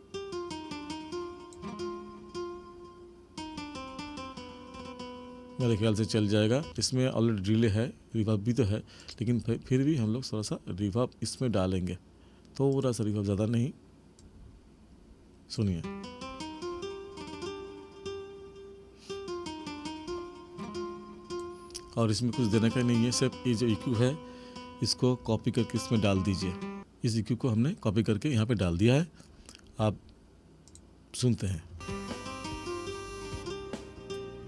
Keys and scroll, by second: 6.7 space, 15.6 space, 31.7 space.